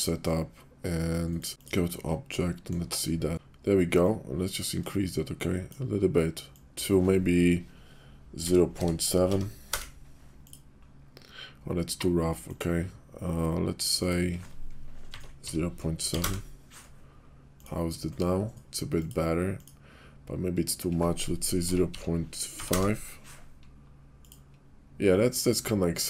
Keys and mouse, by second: 2.5 click, 4.1-5.7 shift+drag, 6.5 click, 8.7 0, 9.3 7, 9.7 Return, 13.9-17.6 drag, 18.9 click, 20.7-23.2 drag, 24.1 click.